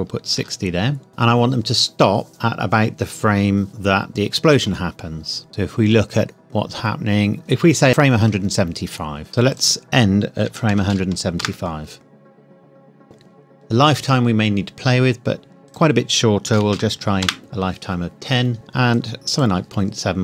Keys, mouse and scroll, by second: 0.3 KP_6, 1.1 KP_Enter, 5.5 click, 9.5 click, 10.4 KP_1, 10.7 KP_7, 11.4 KP_Enter, 15.6 click, 16.5 KP_1, 16.7 KP_0, 17.2 KP_Enter, 18.9 click.